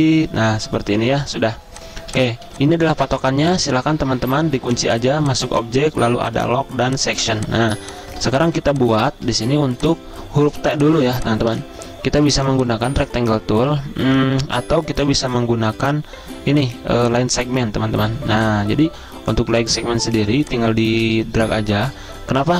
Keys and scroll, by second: 2.0 typing, 3.1 typing, 7.3 z, 9.4 typing.